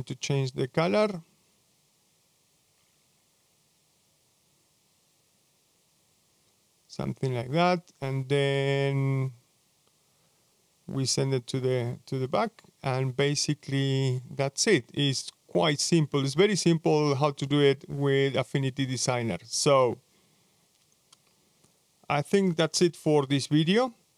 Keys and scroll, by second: 15.6 super+0.